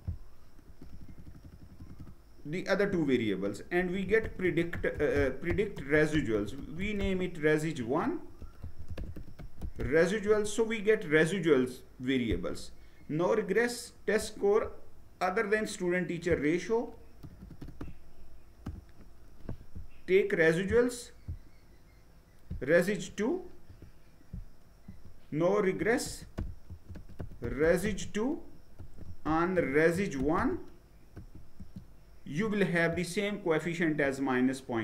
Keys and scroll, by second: 0.2-1.7 typing, 2.5 Return, 3.4-9.8 typing, 9.9 Return, 16.9 BackSpace, 17.1 BackSpace, 17.4 BackSpace, 18.3 Return, 22.7 BackSpace, 23.2 2, 24.5 Return, 25.2-30.8 typing, 31.2 Return.